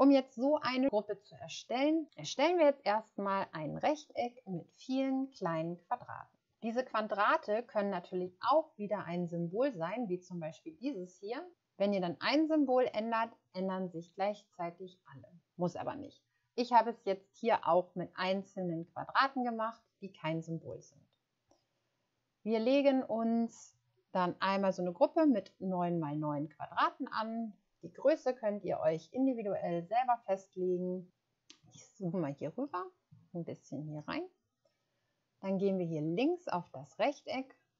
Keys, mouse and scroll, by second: 9.2-9.7 scroll up 1, 31.8 shift+scroll down 1, 33.3 ctrl+scroll up 1, 34.1 scroll down 1, 34.1 ctrl+scroll up 1.